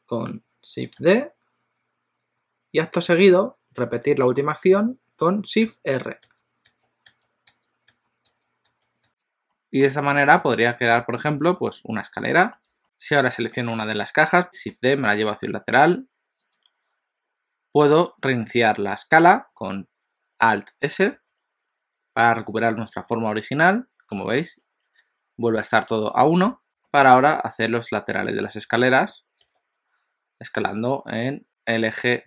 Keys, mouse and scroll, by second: 1.0 shift+d, 6.3-9.1 typing, 9.5 middle click, 9.9 scroll down 2, 10.3 alt+a, 10.4 middle click, 11.2 shift+middle click, 12.2 middle click, 12.8 click, 12.9 click, 14.5 shift+d, 21.1 alt+s, 26.7 g, 28.7 s.